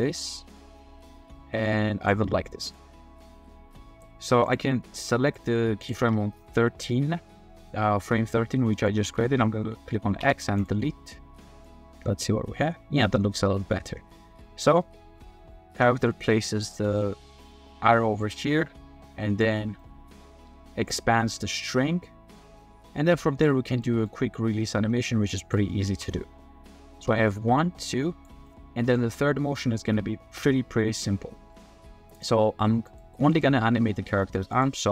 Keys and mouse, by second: 2.7-4.5 drag, 5.1 click, 5.8 click, 8.8 click, 10.2 x, 11.7-13.8 middle drag, 13.8-19.4 drag, 19.8-20.1 drag, 20.9-23.4 middle drag, 23.8 drag, 25.3 drag, 25.7 drag, 25.9 space, 26.9 space, 27.4-28.2 drag, 28.5-28.9 middle drag, 33.3 click.